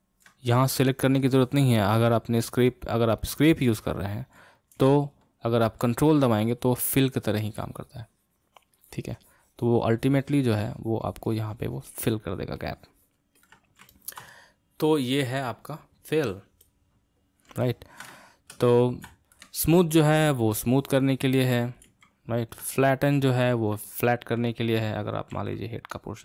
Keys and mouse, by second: 2.0-5.0 drag, 5.0 ctrl+z, 6.2-13.9 ctrl+drag, 13.9-19.9 ctrl+middle drag, 19.9-22.2 drag, 22.2 ctrl+z, 23.2 click, 23.9 middle click, 24.5 click, 25.3 f, 26.0-26.2 drag.